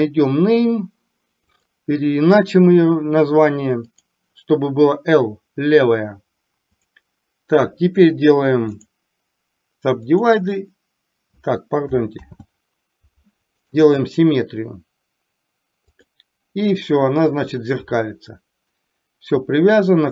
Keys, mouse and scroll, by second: 3.9 click, 12.3 ctrl+z, 15.3-20.1 right drag.